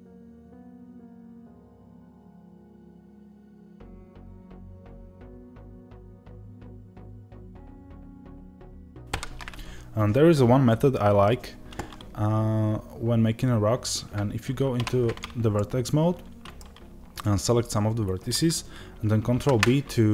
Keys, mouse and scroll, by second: 0.9 click, 0.9 s, 1.4 click, 1.4 g, 1.8 click, 1.9 middle click, 2.3 click, 2.6 middle click, 2.8 e, 3.0 click, 3.1 s, 3.6-5.2 middle drag, 5.2 ctrl+r, 5.6 click, 6.2 middle click, 15.4 middle click, 17.0-19.2 drag, 19.2 ctrl+b.